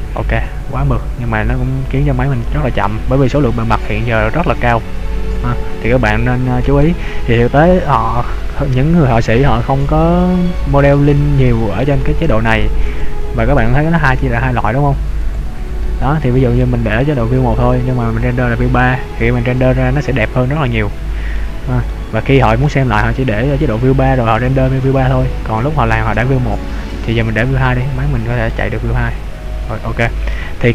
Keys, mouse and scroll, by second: 0.4 middle click, 13.3 click, 15.4 click, 16.6 middle click, 20.6-21.3 scroll up 3, 21.3 middle click, 21.8 scroll down 1, 22.6 middle click, 22.6-24.3 scroll down 1, 27.3 click, 28.0-28.5 scroll up 1, 28.5 middle click.